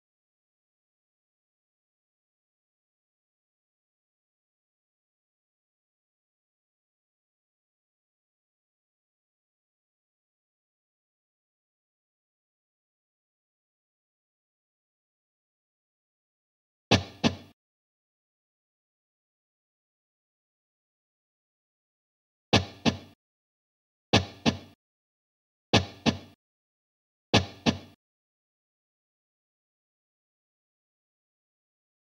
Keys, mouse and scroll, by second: 1.7 super+d, 3.9 click, 11.1 click, 13.5 double click, 15.5 click, 18.8 click, 30.8 shift+click.